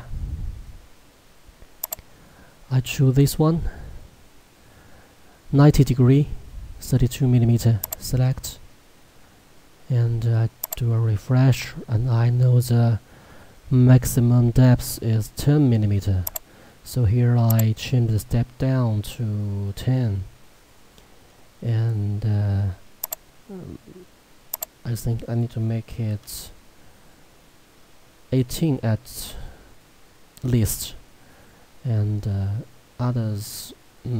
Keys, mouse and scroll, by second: 0.1-0.8 scroll, 1.9 click, 7.9 click, 8.7-10.7 scroll, 10.7 click, 16.9 click, 21.3-22.3 scroll, 23.1 click.